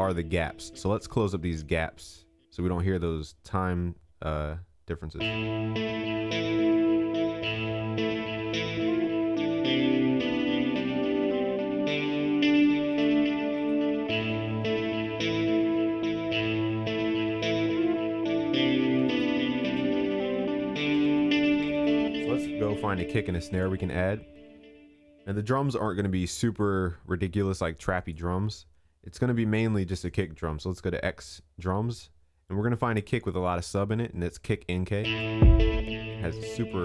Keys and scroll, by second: 14.4 ctrl+s.